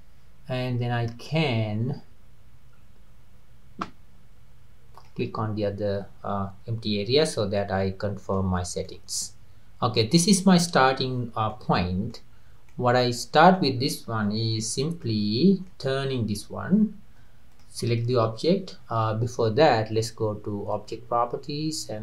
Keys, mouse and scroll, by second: 0.8-2.0 drag, 2.7 middle click, 2.7-3.4 scroll down 2, 4.3 middle click, 4.3-4.7 scroll down 1, 5.0 click, 7.3-8.6 middle drag, 8.6-8.9 scroll down 2, 8.9-11.2 middle drag, 11.2 scroll down 2, 11.5 middle click, 12.3-12.7 scroll up 2, 12.7-13.8 middle drag, 13.8 scroll down 3, 14.7 Tab, 15.0-17.5 middle drag, 17.5 click, 17.9 click, 20.7 click.